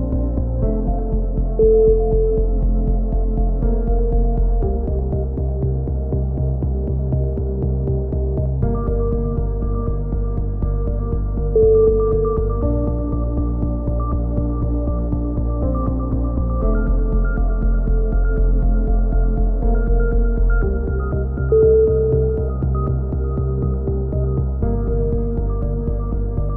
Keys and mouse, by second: 2.8 click, 4.3-7.4 drag, 4.3 right click, 5.8 right click, 7.0 right click, 8.2 click, 8.8 ctrl+z, 9.0-10.9 drag, 10.7 a, 10.9 Tab, 11.4 click, 12.7 Tab, 12.9 click, 13.4-15.2 drag, 15.0-16.1 right drag, 16.1 click, 16.8 right click, 17.3 click, 17.9 right click, 17.9 shift+q, 18.2 ctrl+z, 18.5-19.9 right drag, 19.0 shift+q, 19.7 f, 20.0 a, 20.5 click, 20.7-21.7 right drag, 21.3 z, 21.5 z, 21.7 click, 22.8 right click, 23.3 shift+q, 23.4-24.9 drag, 23.6 a, 24.9 right click, 25.0 click, 25.8 right click, 26.0 f, 26.0 a, 26.2-26.5 drag.